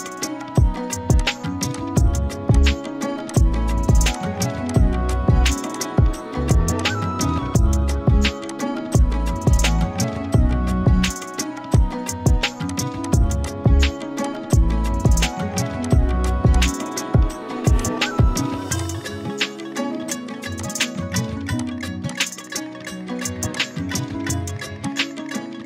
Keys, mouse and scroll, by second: 4.7 shift+click, 5.7 click, 8.9 click, 9.7-11.2 alt+shift+drag, 11.7-13.4 typing, 11.7-12.7 click, 12.7 click, 13.0 click, 13.5 click, 17.7 shift+click, 18.8 click.